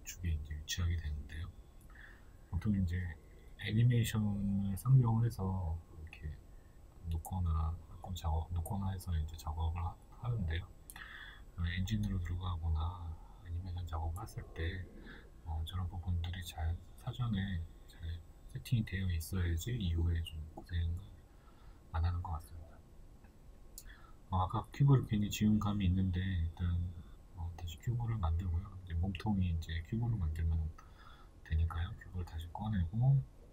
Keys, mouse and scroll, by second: 0.8-1.6 scroll down 2, 6.2 right click, 7.0 g, 10.4-13.4 shift+middle drag, 11.5-12.0 scroll up 2, 12.0-13.4 scroll down 2, 13.4 click, 14.3 shift+a, 18.3-19.4 shift+middle drag, 19.4 click, 21.3 shift+a, 21.9-25.5 shift+middle drag, 22.5 s, 27.2 click, 27.8-33.5 shift+middle drag, 28.4 b, 32.1-32.8 scroll down 2, 32.8-33.5 scroll up 2.